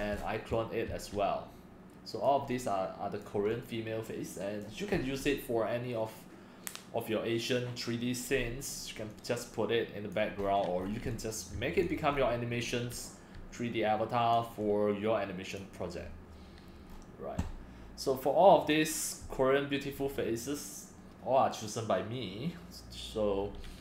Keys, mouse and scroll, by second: 0.2 middle click, 0.2 scroll, 0.2 scroll down 8, 0.4 middle click, 0.4 scroll, 0.5 x, 2.3-9.8 drag, 10.1 click, 10.4 middle click, 10.5-11.1 scroll up 8, 10.8 middle click, 11.6 c, 11.9 drag, 12.1 middle click, 12.1 scroll, 12.2-12.5 scroll up 4, 12.5 middle click, 12.5 scroll, 12.6-12.9 scroll down 2, 14.3-16.9 drag, 16.9 middle click, 16.9 scroll, 16.9 scroll down 3, 17.1-18.7 middle drag, 17.1-18.7 scroll, 18.7-23.8 drag.